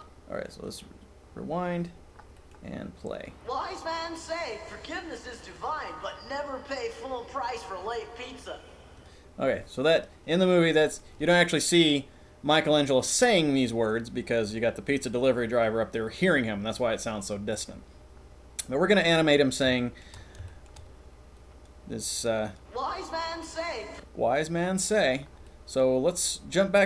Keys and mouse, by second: 0.7 right click, 2.4 middle click, 3.1 right click, 9.1-9.4 middle drag, 19.4-20.1 shift+middle drag, 20.3-20.7 shift+middle drag, 21.3 click, 22.4 click, 24.9 middle click, 25.4 click.